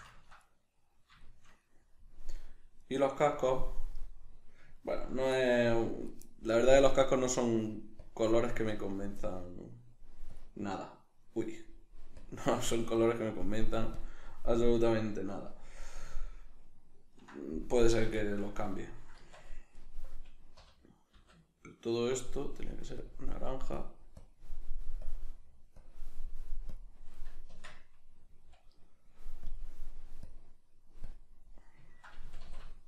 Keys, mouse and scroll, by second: 2.8 right click, 3.3-6.7 middle drag, 6.7-12.1 drag, 12.1-14.9 drag, 14.9-19.7 middle drag, 19.2 Tab, 19.7 right click, 20.6 l, 23.0-27.5 drag, 27.5 Tab, 28.2-29.4 middle drag, 29.4-31.9 drag, 31.9-32.8 ctrl+middle drag, 32.2 a.